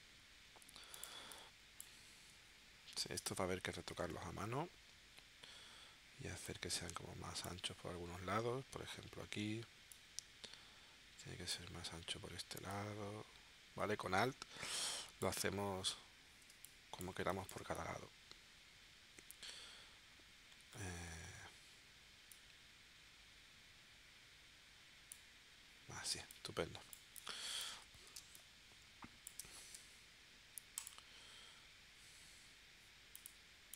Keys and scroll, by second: 1.2 space, 3.9 shift+w, 16.5 space, 26.1 space, 28.1 space, 29.7 v.